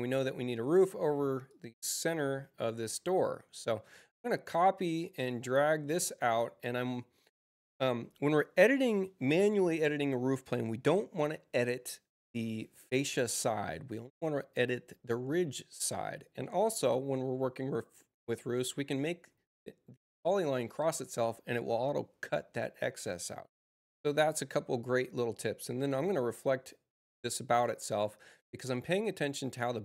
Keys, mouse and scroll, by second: 0.0 click, 1.4-2.5 drag, 4.0 c, 4.9-5.9 drag, 16.8-18.4 drag, 26.2 click, 28.6-29.8 drag.